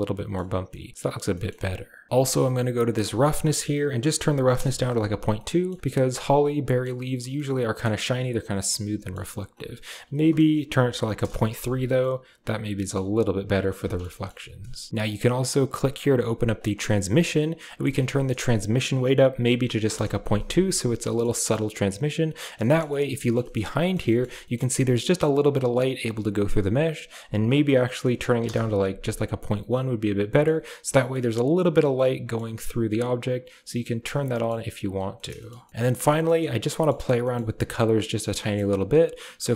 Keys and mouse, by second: 0.7 middle drag, 1.2 middle click, 1.6 click, 2.1 middle click, 2.9-4.5 drag, 5.4 middle click, 5.8-6.7 middle drag, 7.3-7.7 middle drag, 8.6-9.1 middle drag, 9.7-11.1 drag, 12.0-12.8 middle drag, 13.8 shift+middle click, 14.1 middle click, 14.9 click, 15.8 drag, 16.4 click, 17.6-19.8 drag, 21.0 middle click, 21.2 shift+middle click, 21.9-22.4 middle drag, 22.6 shift+click, 22.8 middle drag, 23.5 middle drag, 24.0 shift+middle click, 26.9-28.3 drag, 29.6-30.3 middle drag, 31.0-32.2 middle drag, 32.8-33.9 middle drag, 34.1 middle click, 35.1 middle click, 35.3 shift+middle click, 35.6 middle click, 35.7 middle click, 36.2 shift+middle click, 36.7 middle click, 37.2 click, 38.3 drag, 39.2 shift+a.